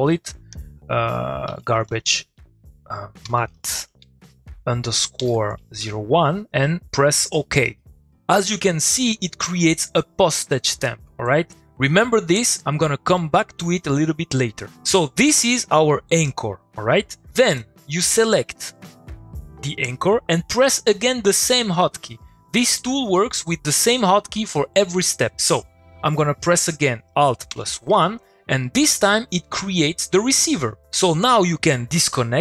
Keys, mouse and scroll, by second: 0.0-2.4 typing, 4.2-5.0 typing, 8.3 click, 11.2 click, 15.2 click, 19.7 click, 27.2 click, 28.6 middle click.